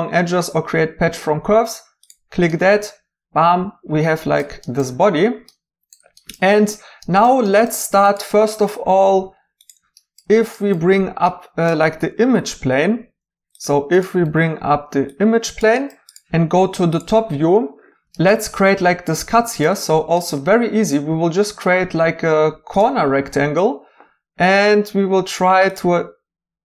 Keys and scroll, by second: 12.2 g, 14.2 g.